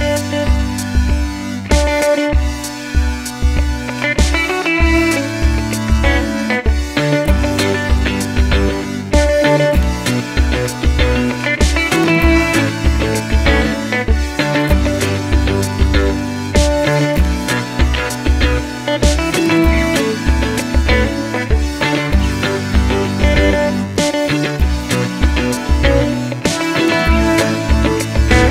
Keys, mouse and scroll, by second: 1.2-9.1 middle drag, 6.9 ctrl+1, 7.7 ctrl+z, 9.1 click, 9.6 click, 10.4-15.8 drag, 15.8-19.6 middle drag, 19.6 click, 21.2 click, 22.5 click, 23.1-25.6 drag, 25.6-28.5 middle drag.